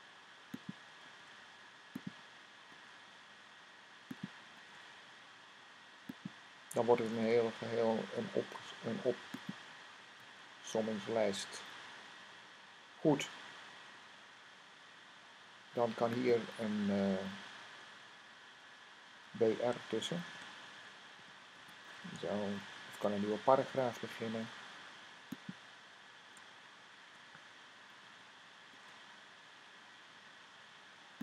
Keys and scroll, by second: 0.9 v, 2.6 v, 4.5 v, 7.0 super+v, 9.6 typing, 12.6 typing, 19.9-21.4 typing, 22.7 typing, 27.7 Right, 28.6 v.